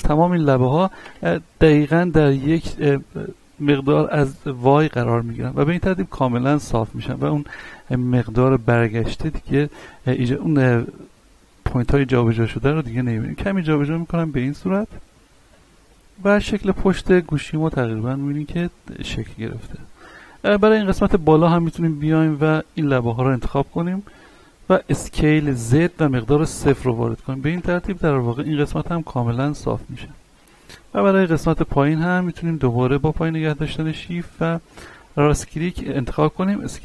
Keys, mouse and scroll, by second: 1.8-5.1 middle drag, 5.1 scroll down 1, 5.6-7.8 middle drag, 7.8 scroll up 1, 8.2 shift+middle click, 8.8 scroll up 1, 11.5-14.1 drag, 14.1-14.4 scroll down 1, 14.5 middle click, 15.1 scroll down 1, 15.4 Tab, 15.7-17.5 middle drag, 17.5-18.0 scroll down 1, 18.0-20.2 middle drag, 20.5-21.0 scroll up 1, 21.0 Tab, 21.5 middle click, 21.9 ctrl+Tab, 22.3 click, 22.7 right click, 23.3 shift+right click, 24.3 middle click, 25.2-26.2 typing, 29.7-30.0 scroll down 1, 30.2 shift+middle click, 30.9-31.3 scroll up 1, 31.3 middle click, 32.0 right click, 32.5 shift+right click, 33.1-33.4 scroll up 1, 34.7 shift+right click, 36.4 s.